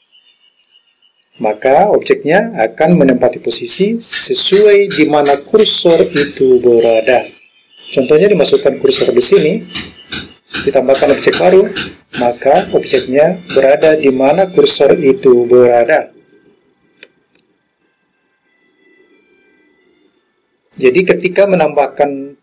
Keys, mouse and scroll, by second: 7.3 click, 9.3-11.6 drag.